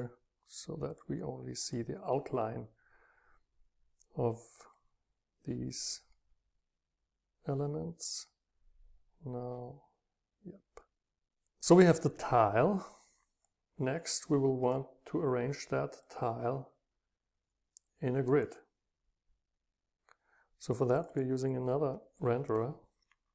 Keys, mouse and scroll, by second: 0.0-1.6 drag, 4.8 click, 4.9-7.5 middle drag, 4.9-7.5 scroll up 2, 8.3 middle click, 8.3-8.9 scroll down 4, 8.6 middle click, 9.4 scroll down 2, 9.7-11.6 scroll up 2, 11.6-12.5 drag, 14.7-18.4 drag, 21.0 click, 21.1 click.